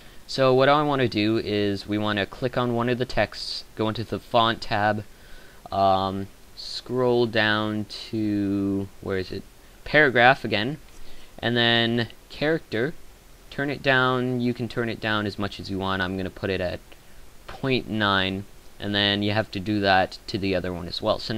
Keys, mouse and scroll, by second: 0.0 Escape.